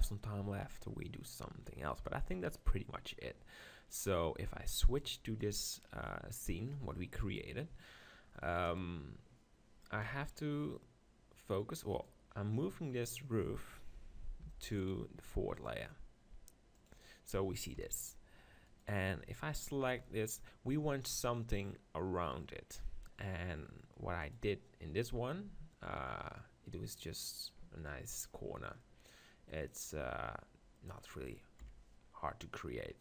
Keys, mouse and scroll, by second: 4.8-7.2 drag, 7.2 KP_1, 8.6 KP_0, 9.9 KP_7, 12.0-13.6 drag, 13.6 middle click, 14.4 m, 16.8-18.5 drag, 17.9 KP_7, 19.6 click, 20.0 z, 24.2-26.1 drag, 26.1-30.6 middle drag, 30.8 middle click, 31.6 KP_7.